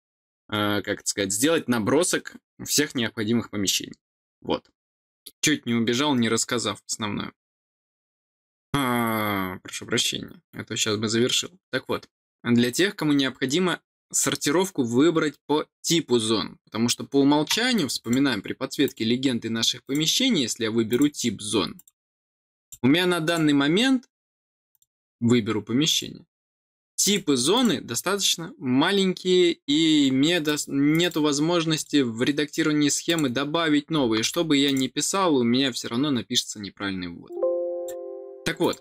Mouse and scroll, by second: 17.9 click, 18.8 click, 19.8 click, 20.8 click, 21.7 click, 22.5 click, 23.2 click, 24.6 click, 25.8 click, 27.0 click, 27.5 click, 30.4 click, 30.9 click, 31.7 click, 33.0 click, 34.6 click, 37.2 click, 37.7 click, 38.5 click.